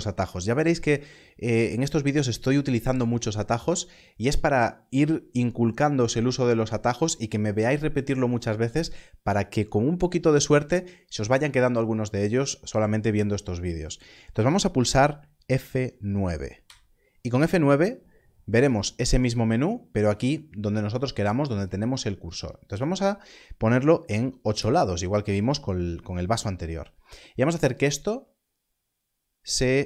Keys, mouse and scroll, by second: 16.5 F9, 22.6 F9, 23.9 click, 24.4 Return, 27.8 click.